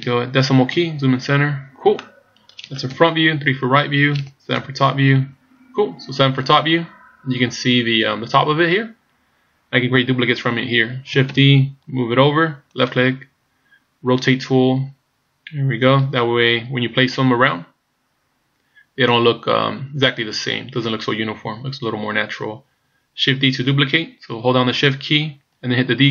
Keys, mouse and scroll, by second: 0.8 KP_Decimal, 1.9 middle click, 2.9 KP_1, 3.4 KP_3, 4.6 KP_7, 5.5-6.2 scroll down 7, 7.1-7.7 scroll down 1, 8.3 scroll down 1, 11.4 shift+d, 14.2 r.